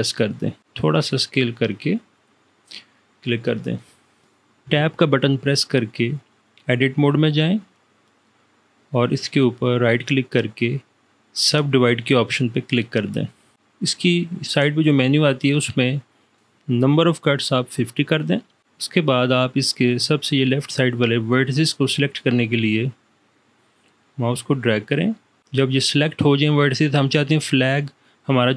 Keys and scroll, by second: 4.8 Tab.